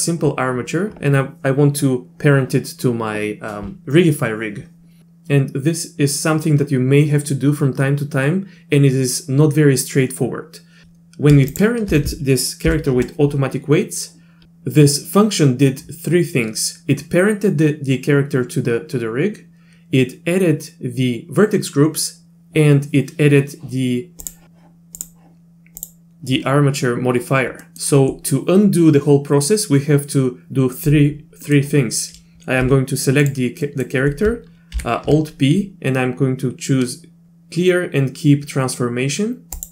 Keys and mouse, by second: 11.5 shift+click, 12.6 ctrl+p, 14.4 Escape, 24.2 click, 25.0 click, 27.6 middle click, 31.4 middle click, 32.6 g, 33.6 middle click, 34.7 alt+p.